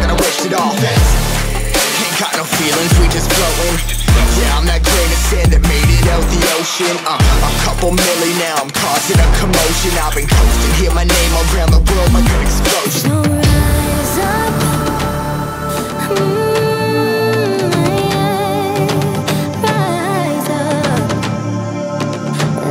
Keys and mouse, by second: 9.3-12.1 drag, 12.1 Tab, 13.4 click, 14.1-14.8 middle drag, 15.3-15.7 shift+middle drag, 16.0-16.7 middle drag, 18.2-22.7 drag.